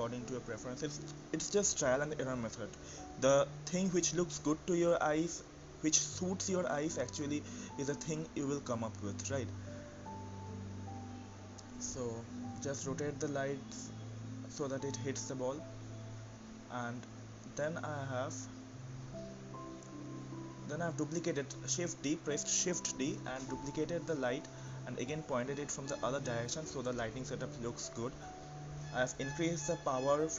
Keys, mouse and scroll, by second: 4.5-5.4 scroll down 1, 5.4-7.3 scroll up 1, 7.3-12.5 drag, 12.5 KP_0, 13.5 click, 14.6-15.4 drag, 20.2 shift+d, 23.4 click, 30.2 KP_0.